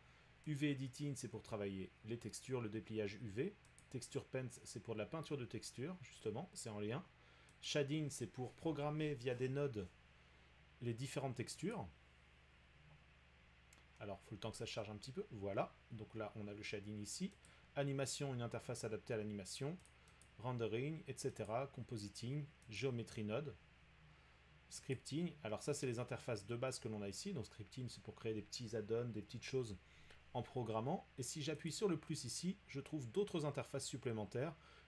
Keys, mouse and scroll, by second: 0.6 click, 1.6-4.1 drag, 7.6 click, 11.7 click, 17.5 click, 19.9 click, 20.2 click, 21.5 click, 22.8 click, 25.0 click, 31.7 click.